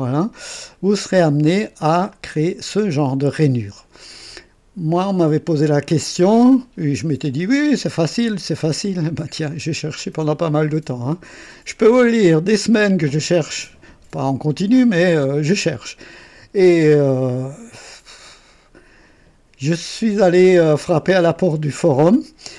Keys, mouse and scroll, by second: 1.2 click, 2.1-5.3 drag, 5.5-9.8 drag, 10.0 click, 11.3-12.6 drag, 14.5-16.6 drag, 17.0-17.9 drag.